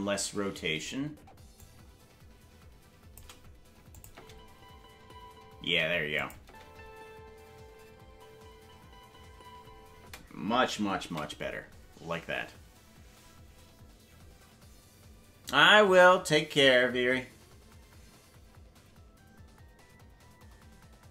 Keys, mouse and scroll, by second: 1.5-3.2 drag, 3.9 click, 4.1 space, 6.1 click, 6.1 space, 6.4 space, 10.7 space, 12.8 ctrl+s.